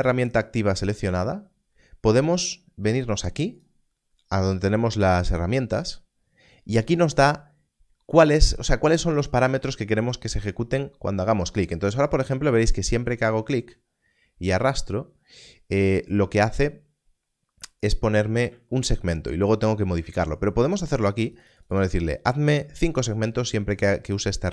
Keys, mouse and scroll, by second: 18.4 click, 21.2 click.